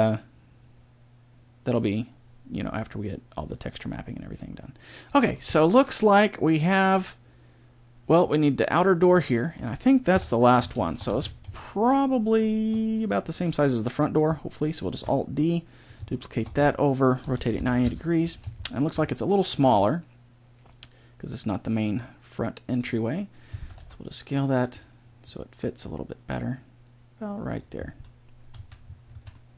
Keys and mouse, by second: 5.5-7.3 middle drag, 9.2 middle click, 10.1 KP_7, 11.0 z, 12.9 right click, 14.8 alt+d, 16.1 middle click, 17.2 r, 19.6 g, 23.5 s, 25.3 click, 26.6 click, 28.5 z, 29.1 a.